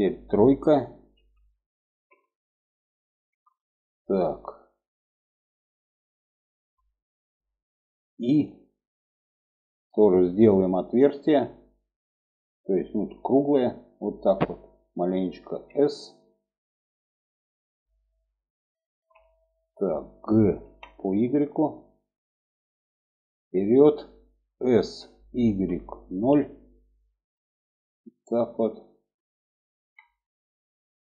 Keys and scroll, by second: 0.7 3, 7.8 i, 15.0 s, 20.1 g, 24.3 s.